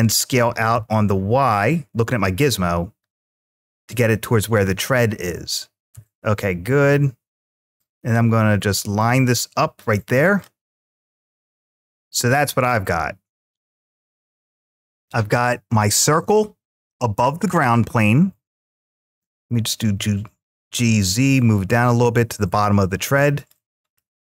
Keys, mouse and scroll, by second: 0.1 s, 0.5 y, 3.5 click, 5.7 g, 6.8 z, 10.1 click, 11.4-12.0 scroll down 3, 11.9-14.7 middle drag, 17.3-19.2 middle drag, 19.7 g, 20.1 z, 23.2 click, 23.8-24.2 middle drag.